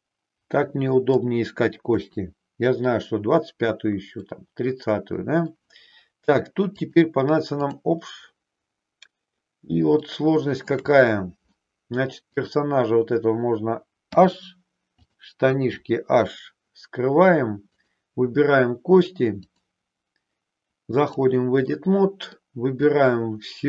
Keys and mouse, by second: 1.9 KP_3, 4.3-5.5 middle drag, 6.9 click, 10.0 shift+middle click, 11.0 middle click, 12.3 click, 14.1 h, 15.7 h, 17.6 click, 19.5-21.1 drag, 21.7 middle click, 22.9-23.6 drag.